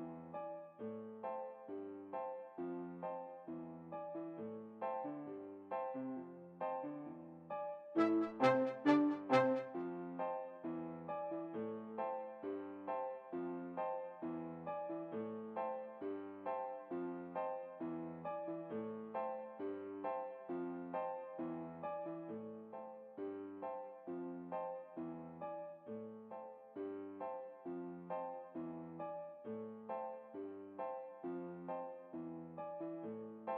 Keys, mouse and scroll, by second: 0.2 a, 0.3 a, 0.7 a, 1.7 t, 4.8-6.2 middle drag, 6.1 alt+a, 13.8 Escape, 16.7-18.2 middle drag, 19.7 t, 21.2-23.1 middle drag, 23.7 alt+a, 30.9 Escape, 33.0-33.5 drag.